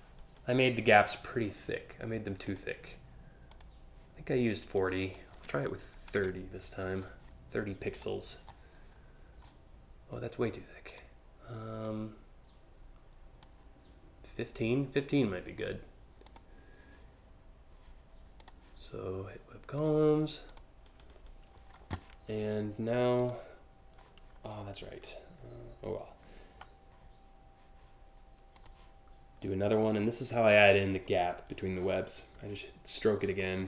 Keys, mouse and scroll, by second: 2.1 click, 3.1 click, 4.4 click, 7.6 click, 10.5 right click, 11.4-13.0 drag, 15.9 click, 18.0 click, 19.4 click, 20.1 click, 22.8 click, 28.2 click.